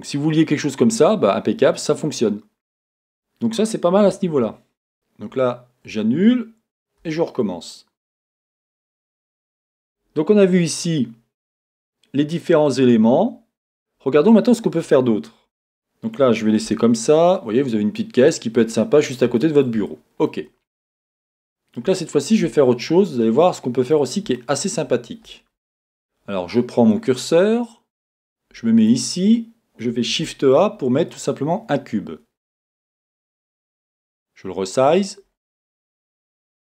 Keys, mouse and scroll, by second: 0.4 scroll, 4.2 z, 5.3 z, 7.0 i, 8.3-12.6 drag, 13.7-14.2 scroll up 1, 14.2-15.7 middle drag, 16.6 Tab, 16.9 middle click, 18.2 scroll down 1, 18.6-22.7 shift+middle drag, 21.1-21.5 scroll up 2, 22.6-23.4 scroll up 2, 22.8-27.1 middle drag, 24.0-24.3 scroll up 1, 27.1-30.1 drag, 30.1 shift+a, 32.9 s, 35.0 click, 35.3 scroll, 35.6 scroll up 1.